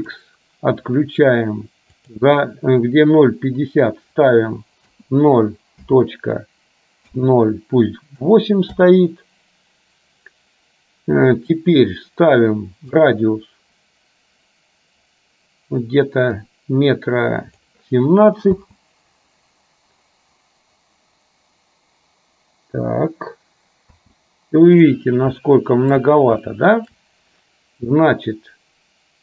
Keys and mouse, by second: 0.1 click, 2.1-9.0 drag, 13.2-17.7 drag, 18.6 space, 24.1 space, 25.6 shift+middle click, 26.5 shift+middle click.